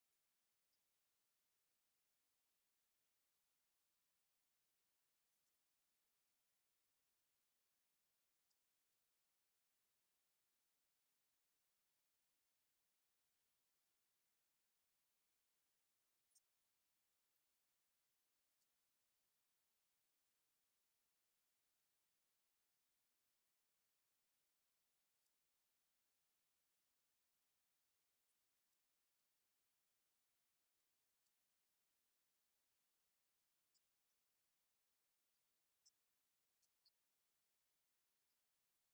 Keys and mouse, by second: 2.2 right click, 2.8 right click, 4.0 right click, 4.6 right click, 6.1 right click, 14.1 middle click, 14.9 click, 15.5 click, 15.9 click, 16.4 click, 16.8 click, 17.5 click, 17.8 middle click, 18.7 click, 19.2 click, 19.6 click, 20.3 click, 27.9-29.2 drag, 29.9-31.2 drag, 33.4-37.8 drag.